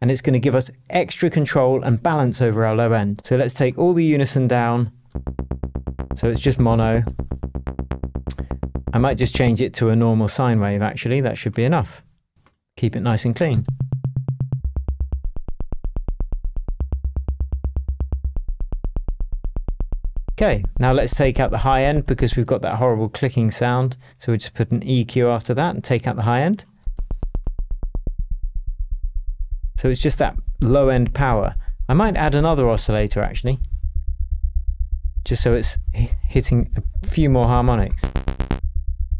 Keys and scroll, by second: 22.3 space, 26.8 space.